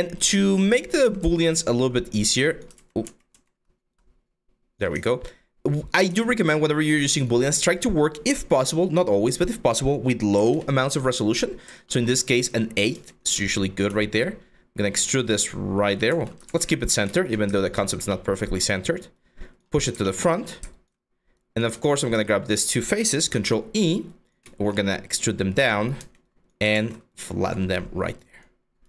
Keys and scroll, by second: 0.6 ctrl+z, 0.8 ctrl+z, 2.4 ctrl+z, 4.5 w, 5.7 ctrl+a, 10.0 8, 10.1 Return, 12.5 r, 13.5 w, 15.7 ctrl+z, 16.1 ctrl+z, 20.6 5, 21.3 q, 22.8 ctrl+e, 23.0 w, 24.5-25.6 typing, 26.3 ctrl+z.